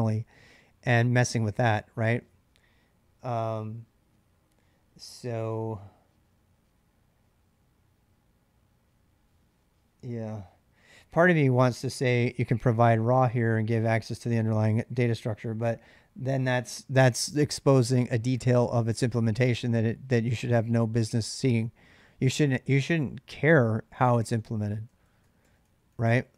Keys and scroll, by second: 12.1-14.0 typing, 23.8-26.3 typing.